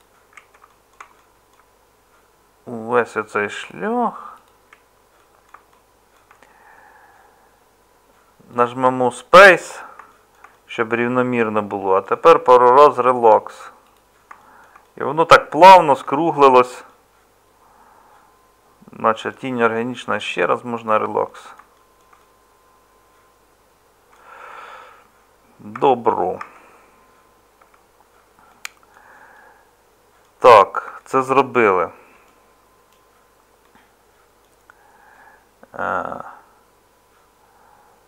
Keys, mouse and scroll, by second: 15.7 middle click, 16.7-21.5 middle drag, 25.7 Tab, 26.4 Tab.